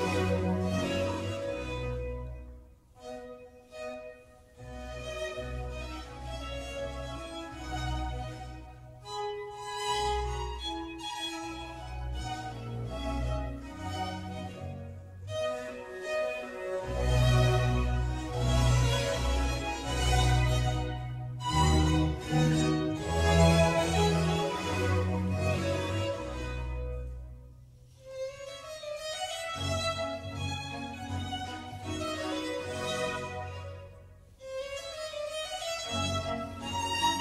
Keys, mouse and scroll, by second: 3.3 click, 5.0-7.4 middle drag, 7.4-9.8 scroll up 2, 9.8-10.8 middle drag, 10.8-11.7 scroll down 1, 11.8 2, 12.2-13.5 middle drag, 13.5 alt+click, 14.2-15.7 middle drag, 15.7 g, 29.0 click, 29.3-32.3 middle drag, 32.7 alt+click, 33.6 g, 37.0 click.